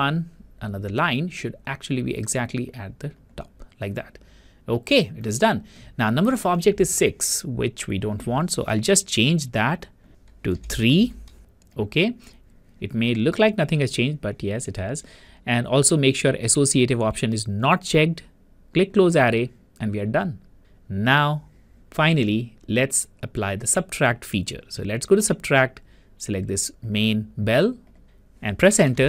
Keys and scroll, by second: 10.8 3, 28.7 Return.